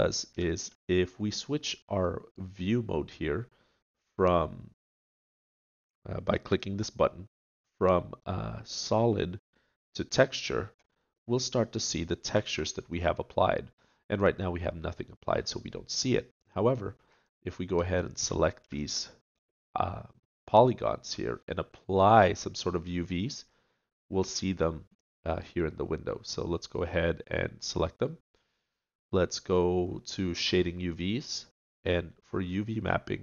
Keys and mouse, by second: 0.5 middle click, 0.6 click, 0.7 middle click, 0.9 click, 1.6-6.4 middle drag, 11.1-12.1 middle drag, 12.9-16.4 middle drag, 16.4-19.6 drag, 19.6-20.8 middle drag, 32.3-33.2 middle drag.